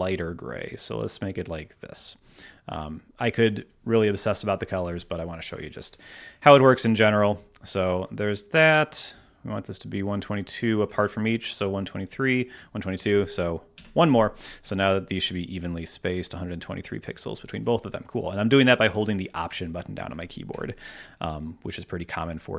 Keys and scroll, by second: 1.1 Escape, 13.7 Down.